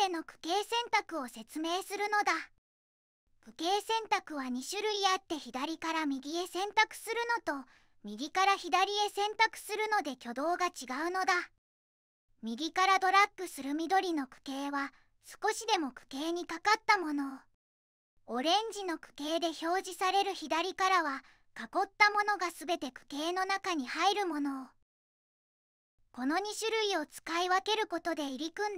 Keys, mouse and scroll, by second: 20.9 click, 21.5 click, 24.7 click.